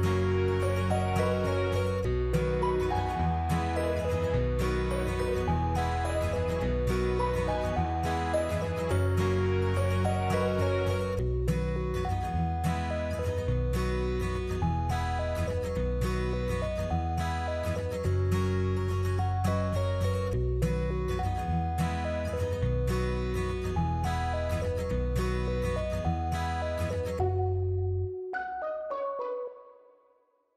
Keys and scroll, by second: 0.3-1.2 typing, 4.4 0, 5.6 6, 7.6 Delete, 8.5 Tab, 9.3 Tab.